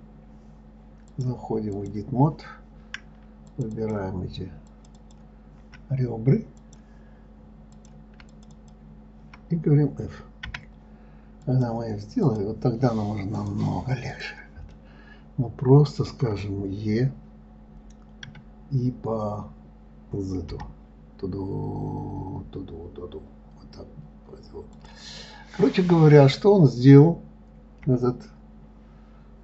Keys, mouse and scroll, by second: 0.2 click, 1.4-3.9 drag, 4.1 shift+click, 5.1 shift+click, 5.3 shift+click, 7.0 click, 8.1 click, 8.7 shift+click, 8.9 shift+click, 10.9 f, 11.8 click, 12.6 click, 13.7 click, 14.5 click, 15.1-18.1 middle drag, 25.5-26.0 scroll down 4, 26.4-26.9 scroll up 1, 26.9-28.3 scroll down 1, 28.3 KP_Divide, 29.0 scroll down 3.